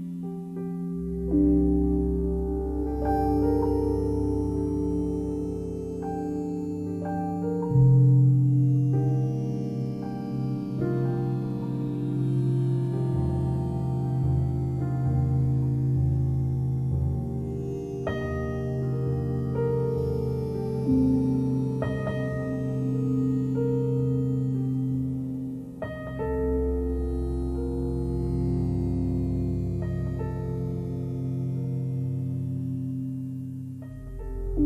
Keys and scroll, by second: 0.2 space, 8.7 space, 20.3 ], 23.3 ctrl+z, 24.1 ], 32.1 space, 33.5 v.